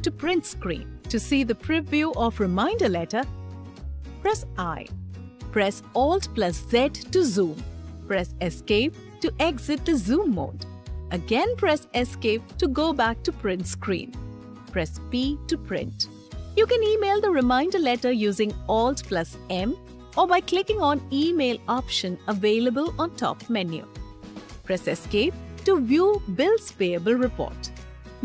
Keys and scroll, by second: 3.6 i, 6.3 alt+z, 8.4 Escape, 11.7 Escape, 14.9 p, 18.8 alt+m, 24.7 Escape.